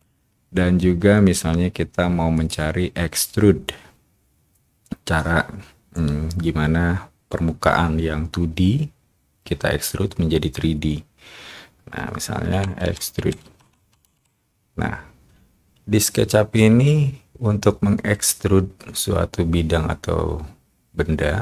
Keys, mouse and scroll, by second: 2.3 click, 12.6-14.1 typing.